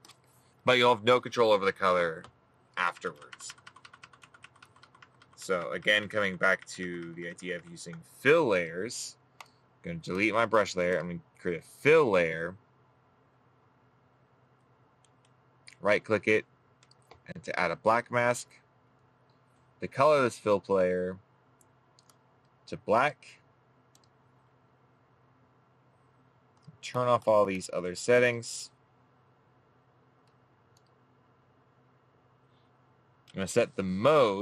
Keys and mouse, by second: 15.7 right click.